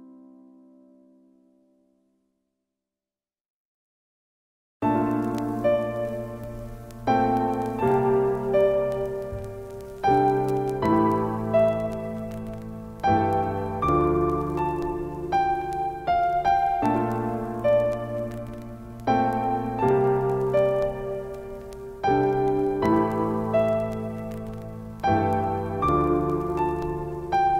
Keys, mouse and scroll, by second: 0.8-5.4 alt+shift+drag, 5.7-11.1 drag, 18.1 click, 19.8 right click, 21.1 click, 24.7-27.0 drag.